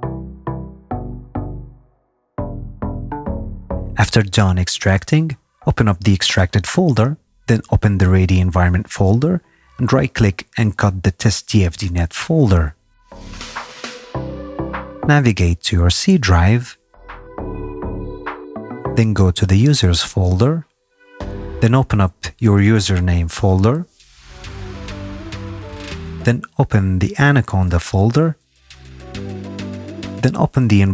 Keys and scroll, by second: 19.5 u.